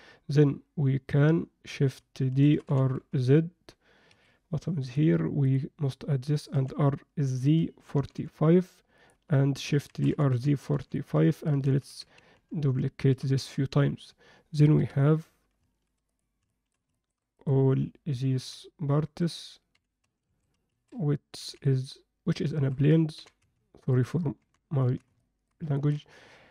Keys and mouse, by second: 2.4 shift+d, 4.9-5.5 drag, 6.5 r, 9.9 shift+d, 11.7-13.4 typing, 14.7 KP_1, 15.2 z, 16.5 shift+middle drag, 16.9 ctrl+alt+middle click, 18.4 h, 19.2 click, 19.7 h, 20.3 a, 21.4 b, 22.5 shift+middle click, 23.1 g, 24.4 alt+h, 24.8 z, 25.2 middle click, 25.7 ctrl+middle click.